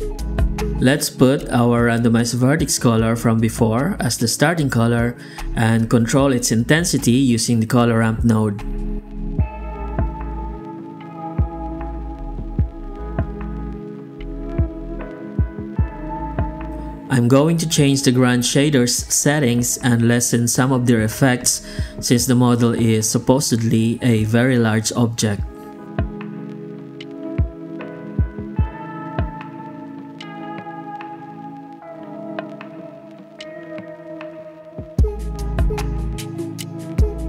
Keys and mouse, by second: 2.6 drag, 3.0 drag, 5.0 n, 5.4 click, 5.8 shift+d, 6.6 click, 8.6-9.5 drag, 9.7-10.9 drag, 11.3-11.9 drag, 13.3 drag, 14.2 click, 15.0-16.3 drag, 19.8 click, 20.6 click, 22.4-23.6 shift+drag, 24.0-26.1 shift+drag, 26.6 click, 29.1 ctrl+c, 29.6 ctrl+v, 30.9 click, 33.7-36.0 drag.